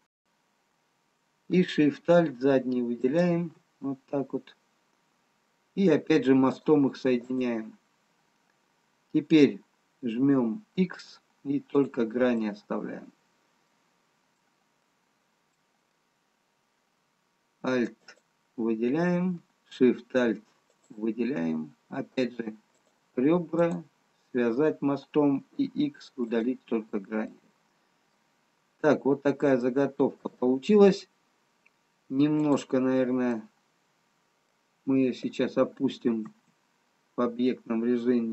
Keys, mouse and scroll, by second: 0.4 alt+click, 3.4 alt+shift+click, 6.9 click, 12.1 x, 13.6 middle click, 15.0 middle click, 15.0 scroll down 1, 16.0 middle click, 18.3 alt+click, 20.7 alt+shift+click, 22.6 click, 25.7 x, 27.8 middle click, 27.8-29.0 scroll down 2, 29.6 middle click, 29.6 scroll down 1, 33.0 click, 34.4 middle click, 36.8 Tab.